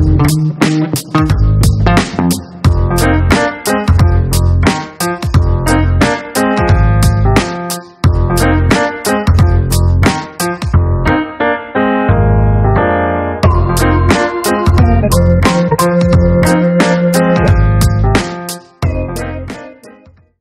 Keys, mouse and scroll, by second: 4.0 click, 11.2 click, 13.6 right click, 15.5 click, 16.6 click, 18.2-19.7 drag.